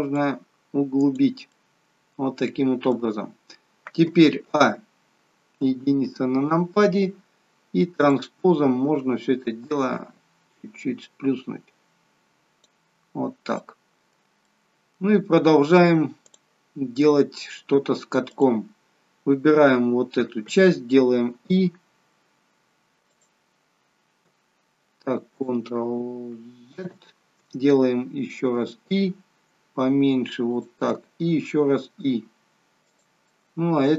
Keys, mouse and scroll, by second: 0.1 click, 1.5 middle click, 4.4 a, 5.6 KP_1, 8.0 click, 9.8 click, 12.9-13.3 scroll up 6, 13.8 middle click, 14.5 middle click, 16.2 click, 18.3 click, 21.3 i, 26.7 ctrl+z, 28.5 i, 33.2 middle click.